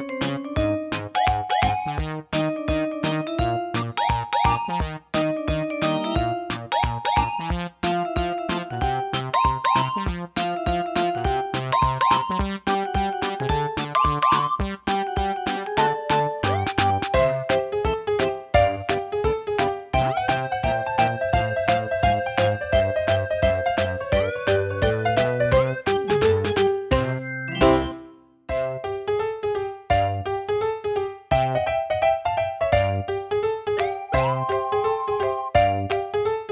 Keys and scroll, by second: 3.5-4.6 typing, 6.7 typing, 10.8 super+a, 18.7-19.4 typing.